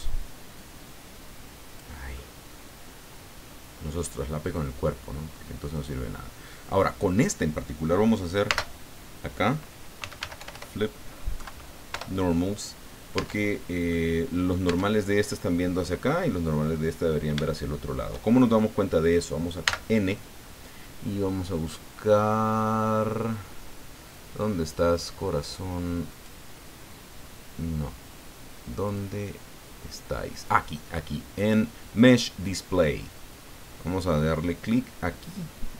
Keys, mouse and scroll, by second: 0.5-2.0 drag, 2.1-7.0 middle drag, 8.4 space, 10.0 f, 10.2 l, 10.4 i, 10.5 p, 11.3 Down, 11.9 Return, 13.1 Tab, 13.8 click, 14.6 Tab, 16.2 click, 16.3 middle click, 17.4 shift+middle click, 19.6 n, 21.2-21.5 scroll up 1, 22.1-22.5 scroll up 2, 23.5-24.8 scroll down 3, 26.1 click, 26.7-27.4 scroll down 2, 28.9 click, 29.4-30.1 scroll down 3.